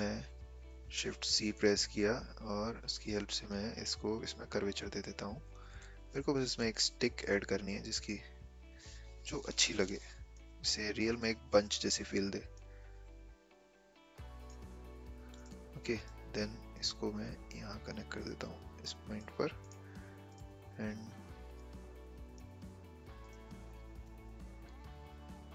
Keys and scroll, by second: 0.4 Escape, 0.9 shift+c, 9.7 a.